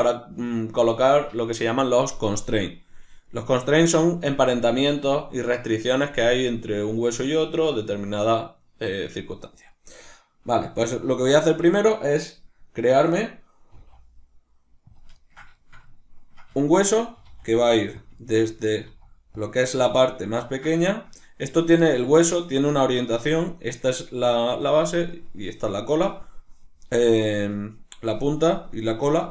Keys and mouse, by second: 9.6 right click, 11.3-15.0 ctrl+middle drag, 13.7 g, 15.0 click, 15.2-18.1 ctrl+middle drag, 17.2 g, 18.1 click, 18.3-19.5 ctrl+middle drag, 18.8 g, 19.5 click, 20.5-22.7 ctrl+middle drag, 22.7 right click, 23.9 right click, 25.0 right click.